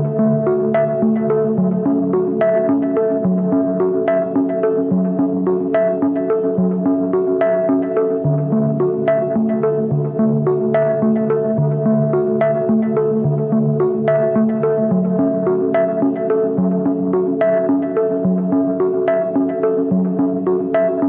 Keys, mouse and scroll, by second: 0.0 right click, 20.3 alt+BackSpace.